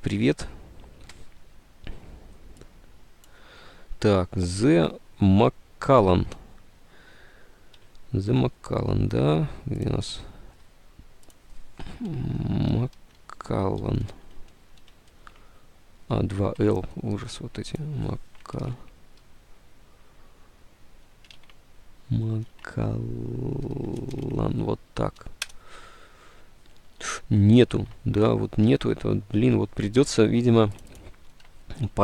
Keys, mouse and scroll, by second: 7.9 alt+Tab, 12.2-15.0 typing, 15.3 alt+Tab, 16.6 alt+Tab, 18.9 Right, 21.5 alt+Tab, 21.7 Right, 22.6 alt+Tab, 22.7 Right, 22.9 Left, 23.0 Right, 23.8 shift+Left, 24.0 Tab, 24.2 l, 25.3 End, 25.5 Return, 25.6 Tab, 27.8 alt+Tab, 29.5 alt+Tab.